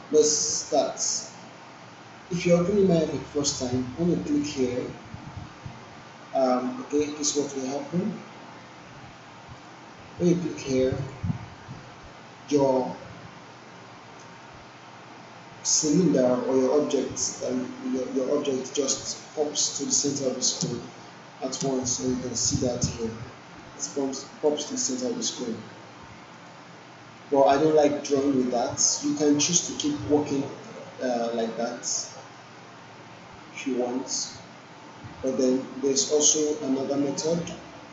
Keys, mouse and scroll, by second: 4.5 click, 6.9 click, 9.6 click, 13.5 scroll down 1, 14.2 alt+middle click, 20.6 space, 22.4 alt+right click, 22.8 alt+middle click, 23.2-24.4 alt+click, 27.2-27.8 alt+click, 28.2 click, 29.5 w, 30.6-33.0 drag, 34.0-36.2 drag, 36.8 click.